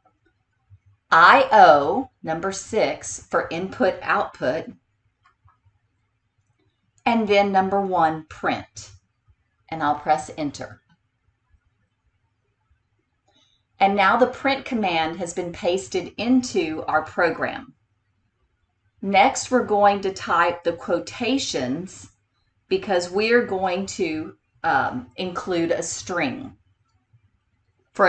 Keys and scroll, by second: 0.0 4, 5.3 6, 10.8 Return.